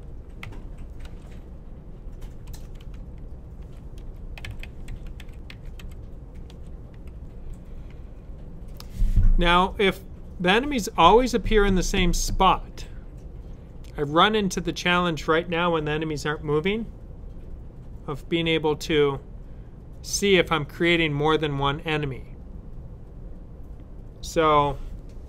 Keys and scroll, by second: 0.0-0.9 typing, 2.1-6.4 typing.